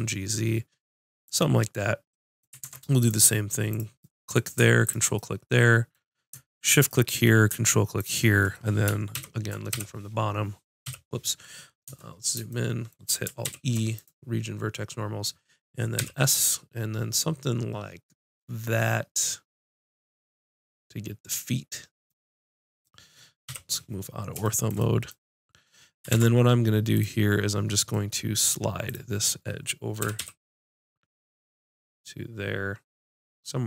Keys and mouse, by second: 1.3-3.3 drag, 2.6 ctrl+Tab, 3.7-9.1 drag, 9.1 ctrl+KP_7, 9.7 KP_5, 10.8 KP_5, 13.4 alt+e, 21.3-23.4 drag, 23.4 KP_5, 23.9 middle click, 26.1 ctrl+Tab, 28.0-29.4 drag, 30.0 g.